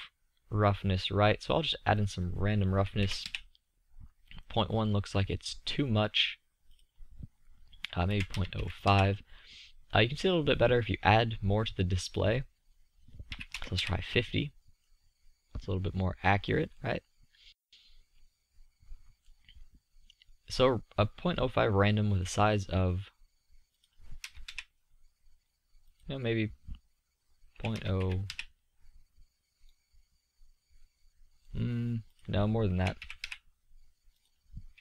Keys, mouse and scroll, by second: 1.6-3.5 drag, 3.5 middle click, 8.3-11.7 middle drag, 13.9 middle click, 17.2-21.6 middle drag, 21.9 middle click, 23.4-25.5 middle drag, 27.2-29.4 middle drag, 31.2 middle click.